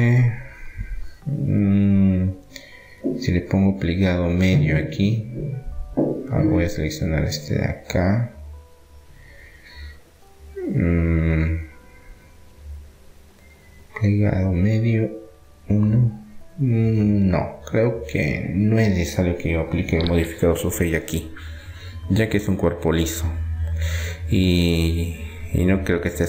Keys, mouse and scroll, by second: 2.0 Tab, 2.6-5.3 middle drag, 7.0-12.9 middle drag, 14.8 middle click, 14.9-16.6 drag, 17.5-19.5 middle drag, 20.5 ctrl+z, 21.3 Tab, 23.5-24.6 drag, 24.6-26.2 middle drag.